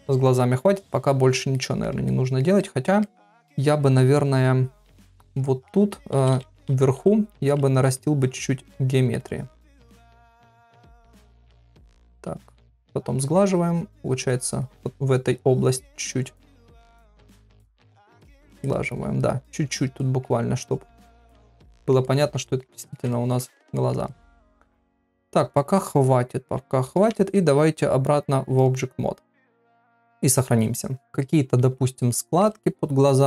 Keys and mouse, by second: 1.5 ctrl+middle click, 2.1 middle click, 2.6 ctrl+middle click, 3.0 middle click, 5.5 ctrl+middle click, 6.2-6.9 [, 7.5-9.0 drag, 9.2 click, 9.5 click, 10.2 click, 10.7 click, 11.3 click, 11.7 shift+click, 12.3 click, 12.6 click, 13.5 click, 14.3 click, 14.6 click, 15.1 click, 15.5 click, 16.0 click, 16.2 click, 16.5 click, 17.2 click, 17.5 shift+click, 17.7 shift+click, 18.0 shift+click, 18.6 middle click, 19.5 shift+click, 19.7 shift+click, 20.0 shift+middle click, 20.7 shift+click, 20.9 shift+click, 21.3 shift+click, 21.8 ctrl+middle click, 22.1 middle click, 22.5 ctrl+middle click, 22.7 middle click, 23.1 shift+middle click, 23.8 ctrl+middle click, 24.0-26.4 middle drag, 26.9 ctrl+Tab, 30.1 ctrl+s, 31.1 shift+middle click, 32.1 shift+middle click.